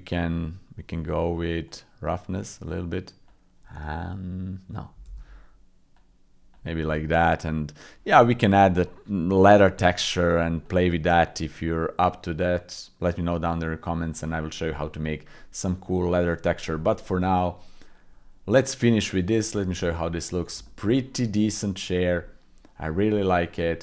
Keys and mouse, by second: 1.7-3.4 drag, 5.1 ctrl+z, 6.0-10.3 drag, 10.6 click, 11.6-14.1 drag, 14.6 middle click, 15.9 middle click, 17.3 middle click, 18.6 click, 20.6 shift+click, 20.9 click, 21.7 click, 22.0 middle click, 22.2 middle click, 22.8 middle click, 23.5 middle click.